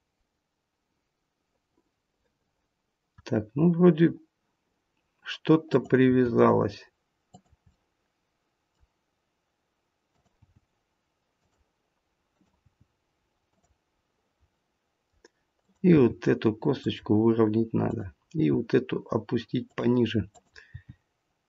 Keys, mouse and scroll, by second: 3.9-5.6 scroll down 1, 5.6 click, 6.1 g, 7.7 middle click, 10.0 click, 10.5 g, 12.2 click, 12.8 g, 13.9-14.5 scroll down 1, 14.5 middle click, 15.5 click, 16.1 g, 17.8 click, 18.3 g, 20.2 click, 20.8 g.